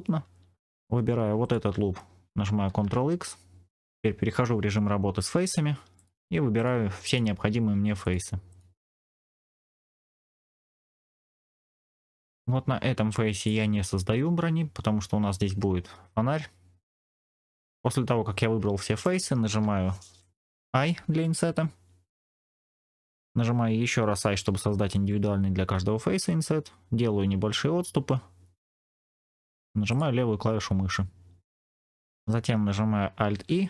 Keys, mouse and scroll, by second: 0.6-1.2 scroll up 1, 1.3 alt+click, 2.6 ctrl+x, 5.8 click, 6.5 shift+click, 7.0 shift+click, 7.9 shift+click, 8.4 shift+click, 9.0 shift+click, 9.3 shift+click, 9.5 shift+click, 9.7 middle click, 10.5 shift+middle click, 10.8 shift+click, 11.0 shift+click, 13.3 shift+click, 14.0 scroll down 2, 16.4 scroll down 1, 17.0-18.9 middle drag, 29.8 click, 30.9-31.5 scroll up 2, 31.5 middle click, 33.2 alt+e.